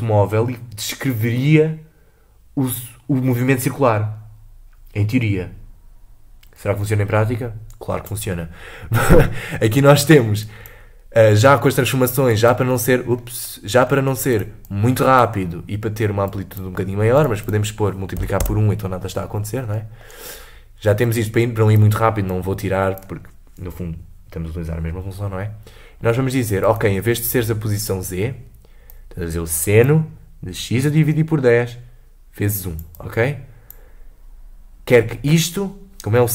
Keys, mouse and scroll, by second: 9.1 middle click, 9.4 scroll down 2, 9.7 middle click, 10.4 click, 11.9-13.2 drag, 13.2-14.3 middle drag, 14.3 click, 14.7-17.3 drag, 17.4-19.7 drag, 19.7 middle click, 20.1-20.5 scroll up 3, 21.1 click, 22.3-25.5 drag, 26.8 click, 29.0 click, 32.6-36.2 drag.